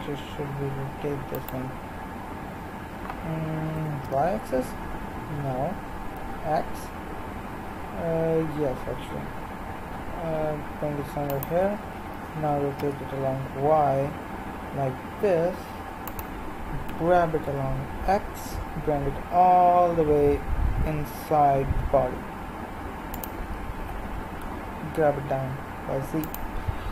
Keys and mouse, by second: 3.7 r, 12.1 r, 16.9 g, 23.8 g.